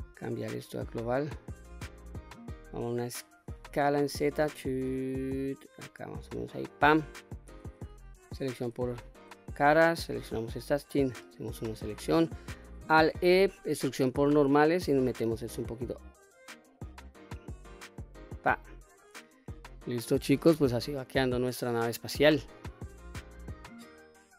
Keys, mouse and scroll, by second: 3.4 s, 3.7 z, 6.4 click, 7.9 3, 8.4 click, 10.2 alt+click, 11.4 middle click, 12.7 alt+e, 17.8 click, 18.3-18.8 scroll down 1, 18.8-20.2 middle drag, 20.6 middle click, 21.8 middle click, 22.7 middle click, 24.1-24.3 middle drag.